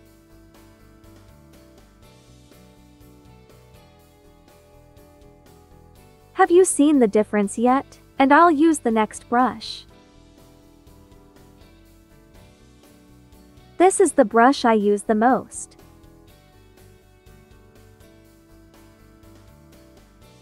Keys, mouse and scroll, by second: 4.4-7.5 typing, 4.5 click, 7.5 click, 9.3 space, 9.4 click, 10.5 ctrl+z, 11.1 click, 15.6 ctrl+z, 15.8 ctrl+click, 18.8-20.4 drag.